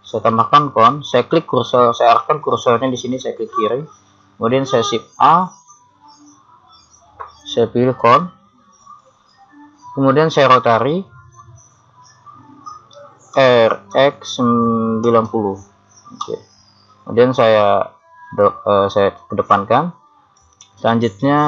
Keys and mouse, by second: 0.8-3.6 middle drag, 3.6 click, 5.1 shift+a, 13.3 r, 17.6 click.